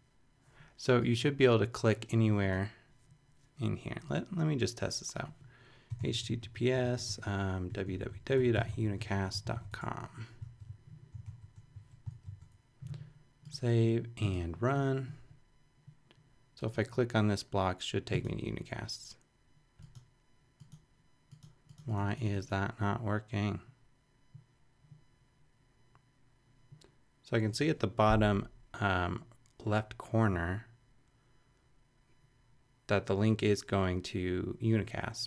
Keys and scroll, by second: 5.7-10.0 typing, 10.4 super+Return, 12.1 shift+super+BackSpace, 13.2 BackSpace.